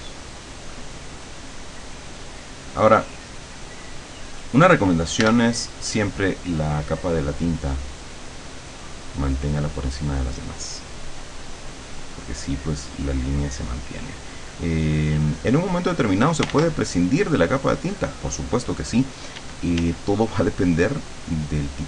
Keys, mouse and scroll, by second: 0.7 click, 1.5-4.5 drag, 5.3 l, 6.7 click, 8.1 click, 11.5 click, 13.3-16.5 drag, 16.5 ctrl+z, 16.9-18.6 ctrl+drag, 19.4 d, 20.5-21.8 drag.